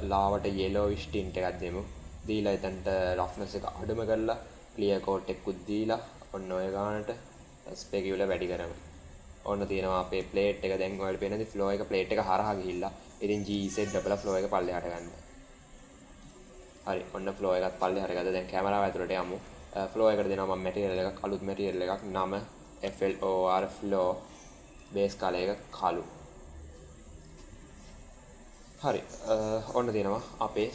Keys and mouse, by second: 3.1 click, 5.1-6.4 drag, 7.6-8.4 drag, 8.8-9.6 middle drag, 10.2 shift+middle click, 13.1 g, 17.2 middle click, 18.3 KP_0, 20.8 click, 21.9-23.9 drag, 23.1 o, 24.7 drag.